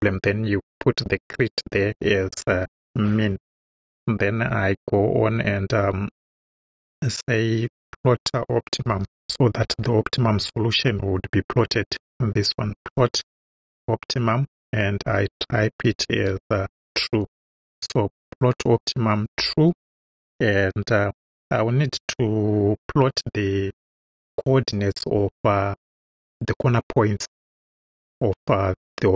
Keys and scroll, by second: 3.2 Right, 6.6 ,, 8.5-10.1 typing, 15.2-17.3 typing, 19.3 ,.